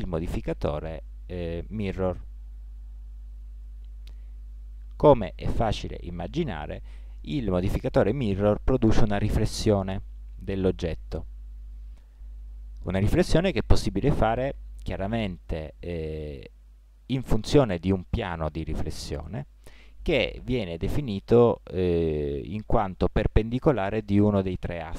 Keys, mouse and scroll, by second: 3.6-7.4 middle drag, 7.4 click.